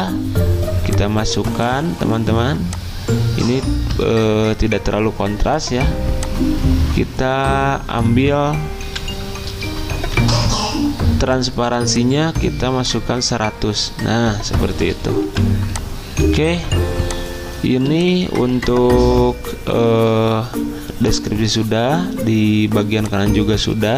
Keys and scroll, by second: 4.1 ctrl+z, 8.9 v, 10.3 F10, 10.4 ctrl+z, 15.2-16.7 typing, 17.7 z.